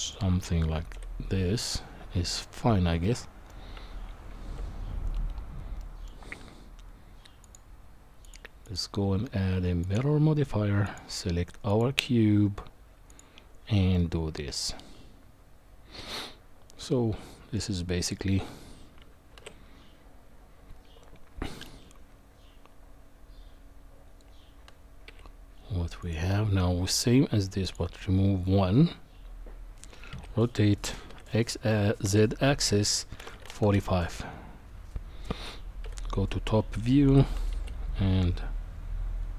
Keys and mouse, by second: 0.9 KP_1, 3.0 middle click, 3.7 Tab, 5.8 middle click, 7.4 click, 8.8-9.9 drag, 10.9 click, 13.1 click, 13.9-17.5 middle drag, 19.3 shift+d, 27.6 click, 30.1 r, 35.8 KP_7, 37.0 g.